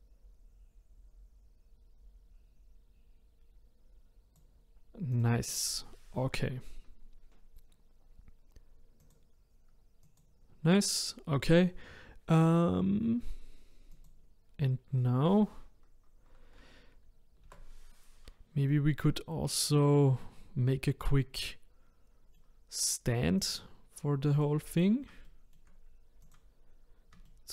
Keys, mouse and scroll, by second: 5.1 click, 9.0 click, 10.1 click, 13.9 click, 17.4 KP_0, 18.1-18.7 scroll down 2, 18.7-19.7 middle drag, 19.7-20.2 scroll up 1, 20.2-23.2 middle drag, 23.4 click, 24.3 click, 25.2-26.2 shift+middle drag, 26.2 click, 26.8-27.2 scroll up 3, 27.2-27.5 shift+middle drag.